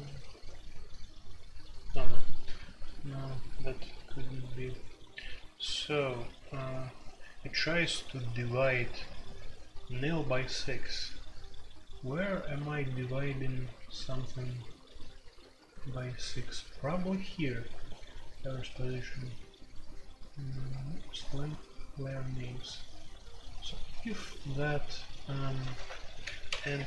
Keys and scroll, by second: 2.6-3.1 typing, 15.0-21.4 typing, 25.7 alt+2, 26.1 j, 26.5 k, 26.7 Return.